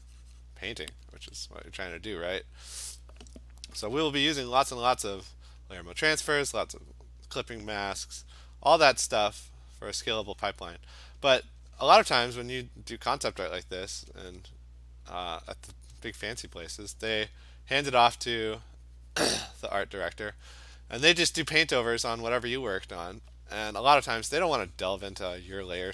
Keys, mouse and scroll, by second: 0.5 click, 1.2 [, 1.5 [, 4.4 alt+click, 4.5 alt+click, 5.6 click, 6.3 click, 6.5-7.8 alt+click, 7.1 click, 7.7 alt+click, 7.8 click, 9.9 click, 10.5 click, 11.4 alt+click, 11.5 alt+click, 12.5 click, 15.4 alt+click, 16.8 click, 19.2 click, 19.5 click, 20.4 alt+click, 21.3 click, 21.9 click, 22.6 click, 22.9 click, 24.8 click.